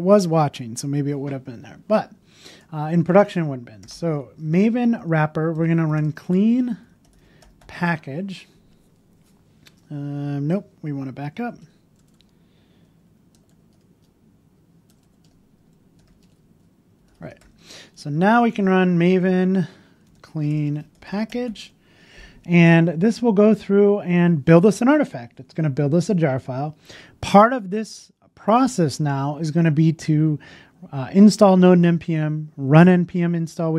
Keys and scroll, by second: 6.8 BackSpace, 12.8 BackSpace.